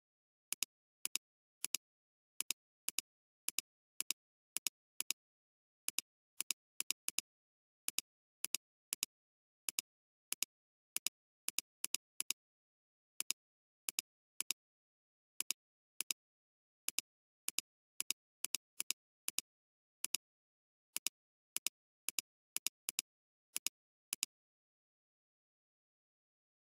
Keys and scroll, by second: 1.1 space, 2.9 space, 5.0 space, 7.1 space, 9.0 space, 12.2 space.